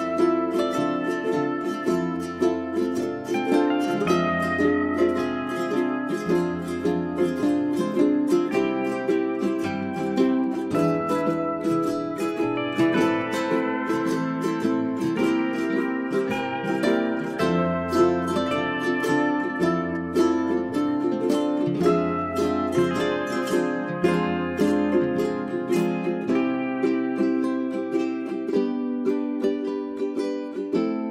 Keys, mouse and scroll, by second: 3.1 1, 3.5-18.6 drag, 19.1 space, 21.2 scroll up 1, 21.5-26.0 drag, 26.2-27.0 scroll down 1, 27.0 middle click, 28.2 click, 28.5 right click, 28.7 click, 30.2-31.1 scroll up 1.